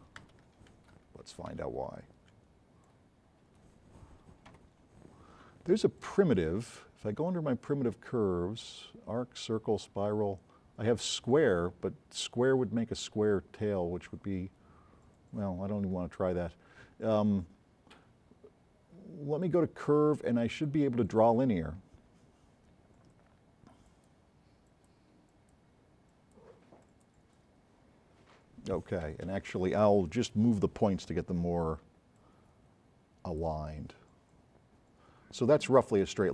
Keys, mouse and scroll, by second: 0.2 z, 1.3 ctrl+z, 2.9-3.7 middle drag, 6.0 click, 21.1 click, 22.7-23.3 scroll down 4, 23.9 click, 24.8 click, 25.3 click, 29.1 space, 30.8 m, 32.2 click.